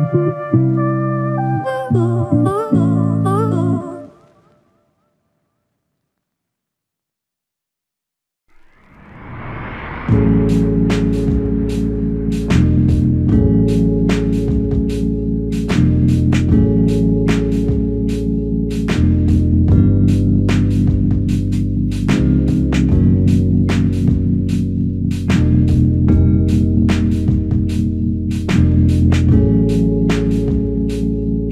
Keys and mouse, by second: 11.8 double click, 15.0 double click, 29.7 double click.